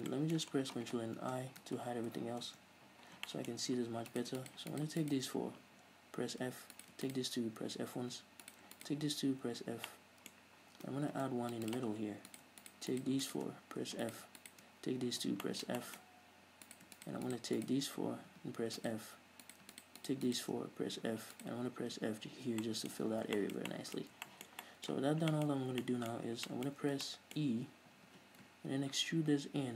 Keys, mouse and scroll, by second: 0.2 scroll down 2, 0.4-0.9 middle drag, 0.9 scroll down 2, 1.7 Tab, 2.1 ctrl+i, 2.4-3.5 middle drag, 2.4 h, 2.8 Tab, 3.6-4.4 shift+middle drag, 4.4 right click, 4.7 shift+right click, 5.0 shift+right click, 5.3 shift+right click, 6.8 f, 7.1 right click, 7.4 shift+right click, 8.2 f, 8.8 right click, 9.1 shift+right click, 9.8 f, 10.2-12.1 middle drag, 11.5 ctrl+r, 12.1 click, 12.1 right click, 12.6 right click, 13.0 shift+right click, 13.2 shift+right click, 13.6 shift+right click, 14.2 f, 14.4 right click, 14.7 shift+right click, 15.4 f, 15.8-17.0 middle drag, 16.4-17.0 scroll up 2, 17.0 right click, 17.3 shift+right click, 17.6 shift+right click, 17.9 shift+right click, 18.6 f, 19.1 right click, 19.8 right click, 20.1 shift+right click, 20.3 shift+right click, 20.6 shift+right click, 21.3 f, 21.7 right click, 22.3 f, 22.6 scroll down 1, 23.0-29.7 middle drag, 23.3 a, 23.5 scroll down 1, 25.9-26.8 scroll up 4.